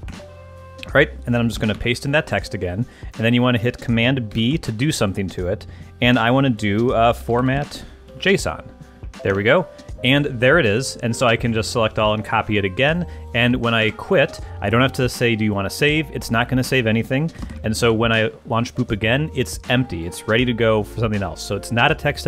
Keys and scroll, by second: 0.0 Return, 1.7 super+v, 4.3 super+b, 6.9-8.7 typing, 8.9 Down, 9.3 Return, 13.8 super+q, 17.4 alt+space, 17.5 alt+Up, 17.8 Return.